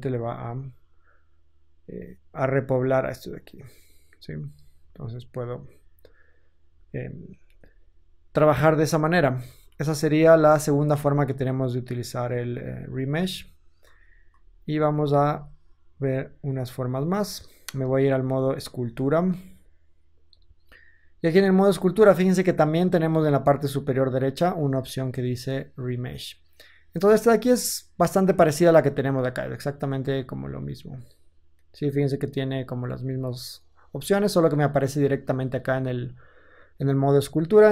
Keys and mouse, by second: 4.5-7.2 ctrl+drag, 7.2 KP_1, 8.3-9.7 ctrl+drag, 8.9 ctrl+z, 9.4 ctrl+z, 9.7 ctrl+z, 10.3 ctrl+z, 12.8 ctrl+z, 13.2 ctrl+z, 13.8 ctrl+z, 14.3 ctrl+z, 14.7 ctrl+z, 15.2 ctrl+z, 17.5 ctrl+Tab, 27.7-30.8 middle drag, 30.8-37.0 drag, 37.0 middle click, 37.5-37.7 drag.